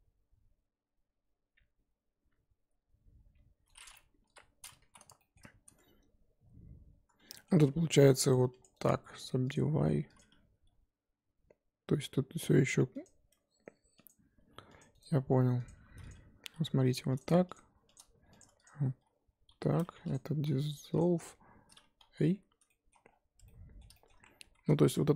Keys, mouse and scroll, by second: 4.2 KP_1, 4.9 z, 5.2 shift+middle click, 5.4-6.9 scroll up 3, 6.9-7.3 scroll up 2, 7.3 shift+middle click, 7.6-8.4 scroll up 1, 8.4 2, 8.5-9.5 drag, 9.5 right click, 9.7 1, 10.1 click, 10.5 g, 14.1 click, 14.5 2, 14.8 click, 15.7 right click, 15.7 1, 16.1 click, 16.4 g, 17.5 shift+click, 18.4 click, 18.6 shift+click, 19.5 j, 19.9 2, 20.1 click, 21.0 x, 22.0 ctrl+z, 22.6 middle click, 23.0-23.4 scroll down 5, 23.4 Tab, 23.4 middle click, 24.1-25.1 scroll up 1, 25.1 Tab.